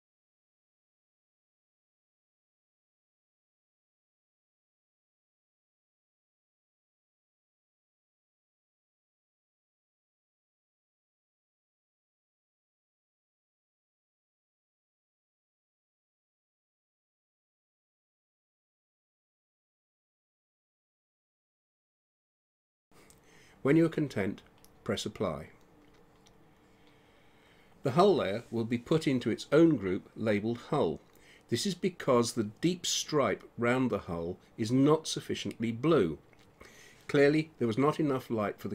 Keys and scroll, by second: 36.3 shift+h, 36.7 u, 37.3 l, 38.4 Return.